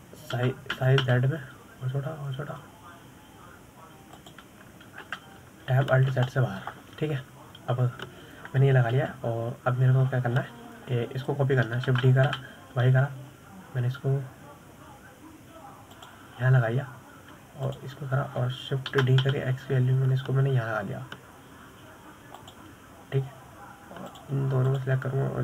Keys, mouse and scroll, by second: 1.5-3.1 middle drag, 3.1 s, 7.4 Tab, 8.2 alt+z, 8.6-11.3 middle drag, 11.3 KP_7, 12.2 scroll up 1, 12.5-13.2 scroll down 9, 13.2-14.1 scroll up 1, 14.3 shift+d, 18.8-19.4 scroll down 2, 20.0 shift+click, 21.3 shift+d.